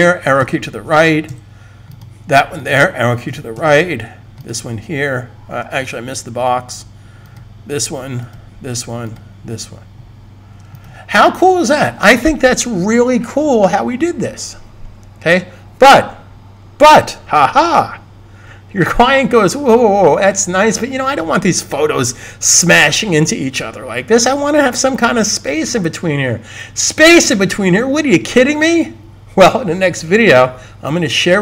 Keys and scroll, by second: 0.3 Right, 1.2 Right, 3.2 Right, 3.5 Right, 5.7 super+z.